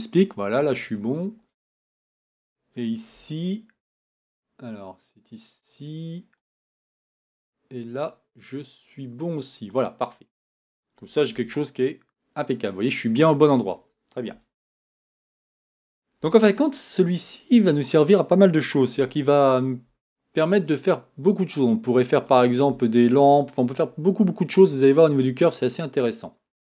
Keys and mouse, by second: 6.4 right click, 11.3 Tab, 19.0 n.